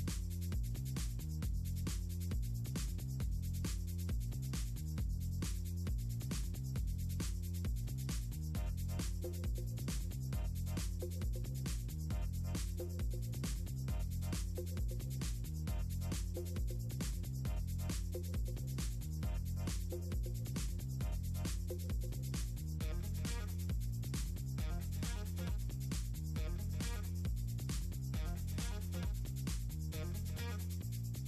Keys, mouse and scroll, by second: 0.8 click, 2.5 click, 3.2 click, 3.4 click, 3.9 click, 4.6 click, 5.4 click, 6.1 click, 7.0 click, 7.4 click, 8.1 2, 8.4 click, 9.2 click, 9.6 click, 10.2 1, 10.4 click, 10.8 click, 11.2 click, 11.6 scroll down 2, 11.9 click, 12.7 click, 13.0 click, 14.1 click, 14.6 click, 15.0 ctrl+c, 15.3 click, 15.8 click, 16.3 click, 16.8 scroll down 2, 17.1 scroll up 2, 17.9 scroll down 4, 18.4 click, 18.8 click, 19.1 click, 19.3 click, 20.0 BackSpace, 21.9 scroll down 2, 23.5 click, 24.0 Right, 25.1 click, 25.8 Up, 26.6 click, 26.9 Down, 27.5 Return, 28.5 click, 28.9 Down, 29.2 BackSpace, 29.6 super+v, 30.5 click.